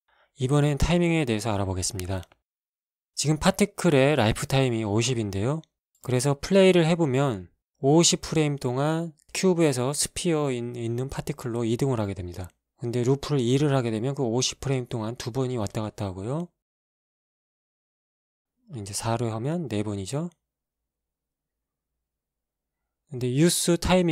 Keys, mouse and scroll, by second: 1.3-3.9 drag, 7.2 alt+a, 13.7 click, 14.3 alt+a, 17.9 Escape, 19.2 click, 19.7 click, 20.4 alt+a, 23.4 Escape.